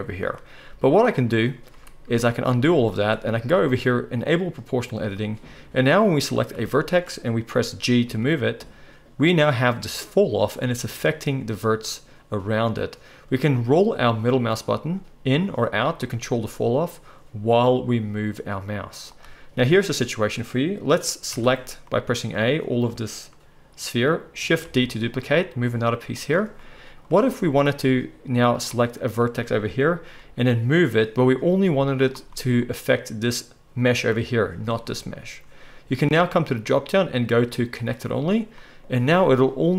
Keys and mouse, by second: 1.1 ctrl+z, 1.1 ctrl+middle click, 1.4 ctrl+z, 1.7 ctrl+z, 2.0 ctrl+z, 2.3 ctrl+z, 2.3-3.5 ctrl+middle drag, 2.8 ctrl+z, 4.5 click, 6.1 click, 7.1 middle click, 8.0 g, 21.3 a, 24.6 shift+d, 30.1 g, 33.2-36.3 middle drag, 36.3-39.7 drag, 39.0 g.